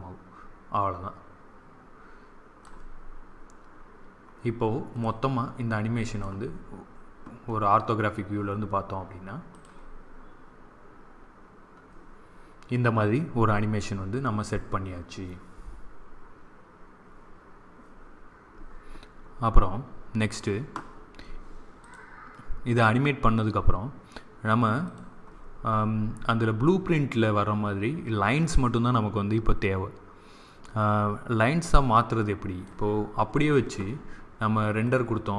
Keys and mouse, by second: 3.0 middle click, 5.0-7.0 middle drag, 7.2 click, 8.1-9.3 middle drag, 9.4-11.2 drag, 19.6-21.7 middle drag, 21.7-23.6 drag, 24.8 click, 28.3 click, 34.8 click.